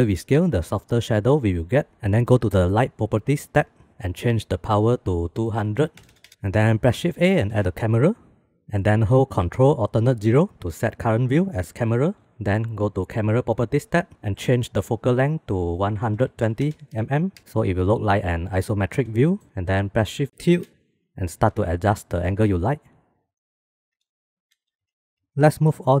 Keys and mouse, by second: 3.4 click, 5.1-6.3 drag, 5.7 KP_0, 7.0 shift+a, 10.0 ctrl+alt+n, 15.3-17.4 drag, 19.4 shift+click, 20.4 shift+`, 22.6 shift+`, 22.9 shift+`, 23.9 shift+drag, 24.6 ctrl+s, 25.1 ctrl+z, 25.5 click.